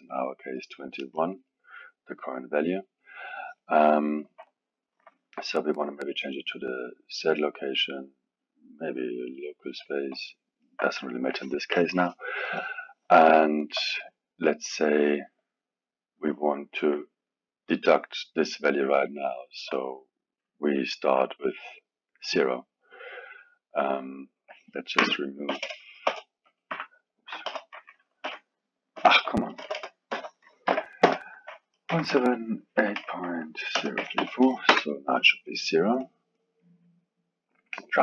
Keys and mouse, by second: 3.7-5.8 alt+middle drag, 5.8-10.2 drag, 10.2-13.2 alt+middle drag, 13.4-17.9 alt+middle drag, 17.9-18.5 drag, 19.5-21.2 drag, 22.9-25.6 drag, 25.6 BackSpace, 29.1 KP_Add, 29.6 BackSpace, 29.7 BackSpace, 36.3-38.0 drag.